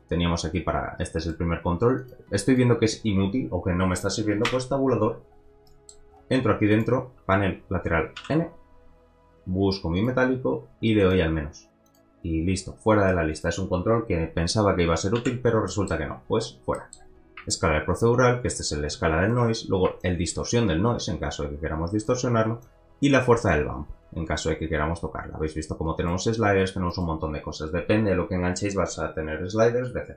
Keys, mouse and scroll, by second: 2.2 click, 4.5 Tab, 5.0-5.4 scroll down 5, 5.6 middle click, 6.1-6.7 scroll up 2, 6.2 middle click, 6.7 click, 8.2 n, 10.0-11.4 drag, 12.0 click, 13.9 Tab, 15.1 n, 15.6 middle click, 16.1-16.7 scroll up 4, 16.7 middle click, 17.5-19.5 shift+drag, 19.9-22.4 shift+drag, 23.6-25.7 drag, 26.8 click, 26.9 middle click, 27.2 scroll down 2, 29.9 middle click.